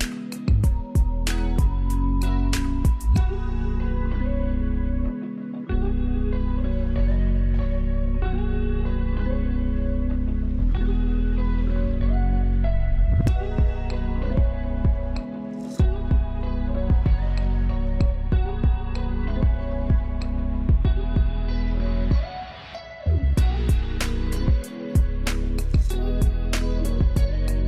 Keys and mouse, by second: 2.6 =, 3.7 click, 8.0 click, 8.3 =, 10.9 click, 14.2 click, 17.2 click, 23.8 Up, 24.3 Right, 25.4 Up.